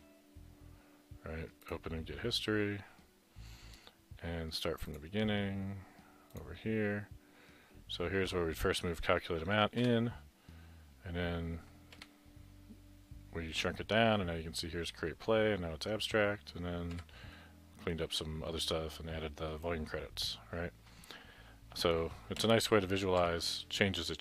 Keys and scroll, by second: 22.4 Left, 23.3 Left.